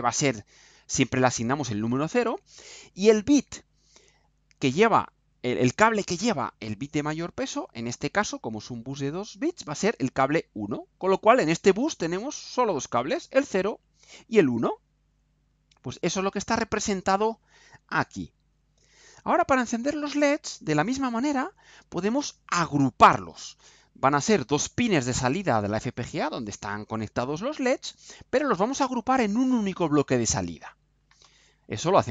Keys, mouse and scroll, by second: 16.0 click.